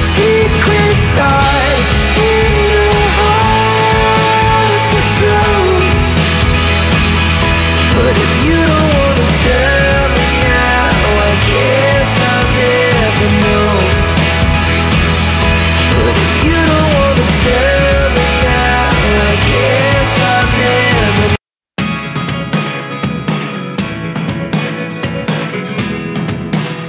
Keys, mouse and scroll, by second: 0.7 click, 1.0 0, 1.5-2.4 scroll down 2, 1.8 click, 2.5-2.9 scroll up 1, 3.7 click, 5.2 click, 5.9 click, 7.3 click, 8.4 click, 10.1 click, 11.1 click, 11.5-13.0 scroll up 1, 13.8 click, 14.4 scroll down 1, 15.0-16.1 scroll up 1, 16.4 click, 20.8 click, 23.1 click, 26.4 click.